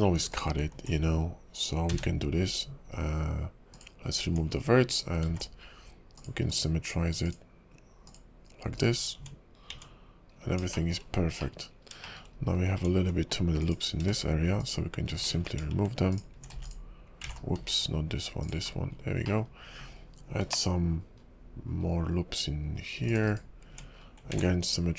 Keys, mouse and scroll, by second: 0.3 alt+click, 1.9 x, 4.3 Tab, 4.5-5.0 scroll down 3, 5.2 alt+x, 6.5 click, 8.0 click, 8.7 right click, 9.1 Tab, 9.7 Tab, 10.3 scroll up 4, 11.0 shift+middle click, 11.1 scroll down 3, 11.4 middle click, 11.7-12.7 scroll up 9, 12.0 shift+middle click, 12.7 Tab, 13.6 alt+click, 14.6 alt+shift+click, 15.3 ctrl+z, 16.1 alt+shift+click, 17.3 ctrl+z, 17.6 x, 18.6-19.2 scroll down 7, 19.2 middle click, 20.4 ctrl+r, 23.6 Tab, 23.9-24.3 scroll down 3, 24.3 alt+x.